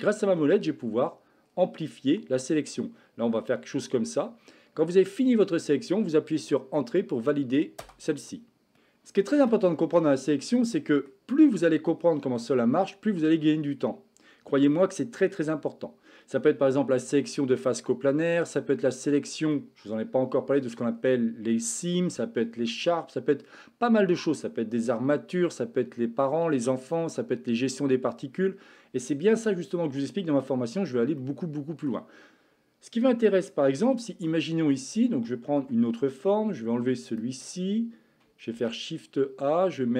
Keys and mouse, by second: 9.4 a, 10.0-11.1 middle drag, 12.4 middle click, 14.7 middle click, 31.2 shift+middle click, 34.3 middle click, 35.5 Tab, 36.8 x, 38.4 shift+a.